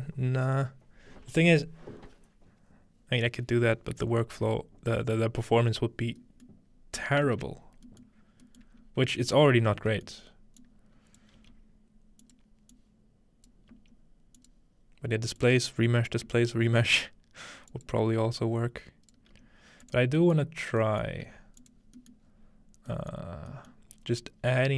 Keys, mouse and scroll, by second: 6.2 middle click, 6.5 middle click, 6.7-8.8 scroll down 1, 7.2-8.5 ctrl+middle drag, 8.8 scroll up 1, 9.6 scroll down 1, 10.6-14.5 drag, 11.4 g, 13.7 g, 15.0-16.1 scroll up 1, 15.4-16.3 drag, 16.1-17.0 scroll up 1, 16.3 g, 17.7 click, 18.4 click, 19.3 g, 19.5-21.9 drag, 20.0-22.3 scroll down 2, 21.2 g, 22.3 scroll up 1, 23.2-24.7 scroll up 4.